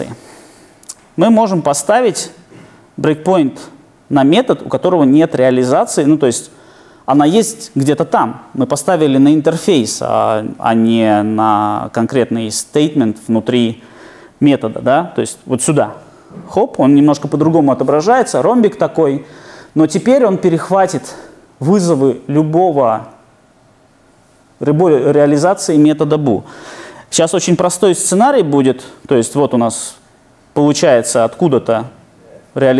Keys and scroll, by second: 16.4 super+F8.